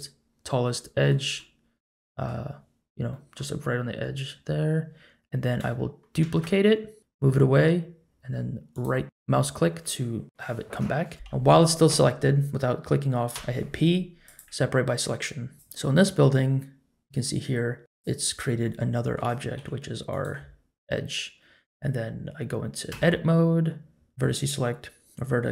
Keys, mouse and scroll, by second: 1.3 middle click, 3.1 middle click, 6.2 shift+d, 13.3 p, 15.5 Tab, 15.5 click, 17.8 click, 18.6-19.1 middle drag, 19.6 g, 22.9 Tab, 24.1 1.